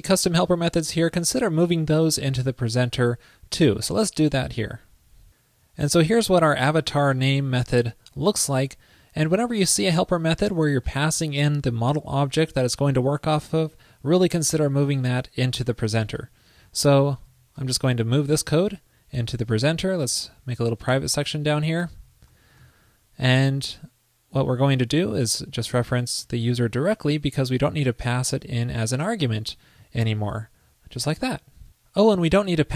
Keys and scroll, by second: 4.6 super+s, 17.5 super+x, 17.5 super+s, 21.6 alt+Left, 22.2 super+Right.